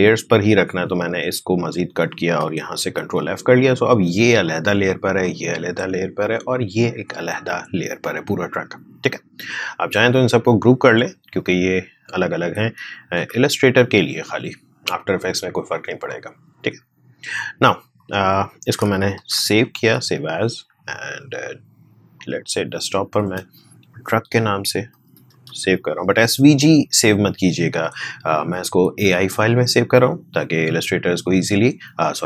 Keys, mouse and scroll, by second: 1.5 click, 3.0 ctrl+f, 3.8 click, 9.9-13.1 drag, 13.1 ctrl+g, 13.7 click, 19.1 ctrl+shift+s, 22.1 click, 24.3-25.9 typing, 27.0 click.